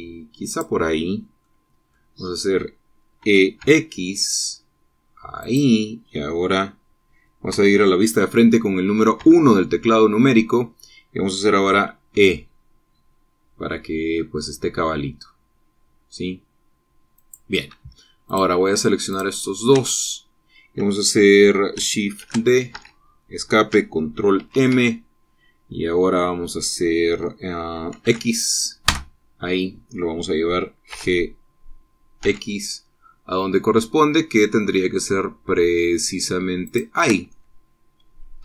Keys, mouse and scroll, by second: 1.2 click, 2.1 click, 3.9 e, 4.3 x, 6.1 click, 9.9 KP_1, 12.9 e, 17.9 click, 19.0 click, 19.8 shift+click, 23.0 shift+d, 23.5 Escape, 25.1 ctrl+m, 28.8 x, 29.6 KP_Enter, 31.6 g, 33.0 x, 37.4 shift+click, 38.0-38.4 shift+drag.